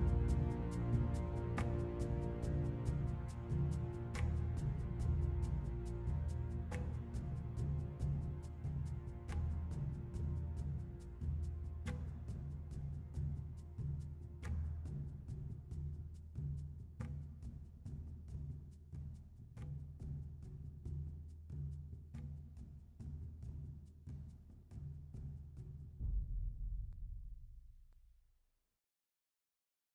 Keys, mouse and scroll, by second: 2.2 super+z.